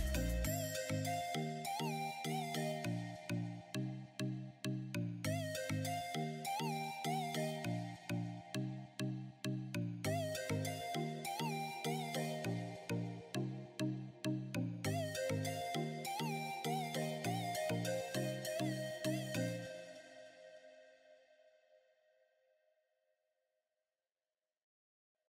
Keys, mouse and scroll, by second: 2.7 click, 3.2 right click, 3.8 right click, 11.4 click, 12.8-13.2 scroll down 1, 15.0 click.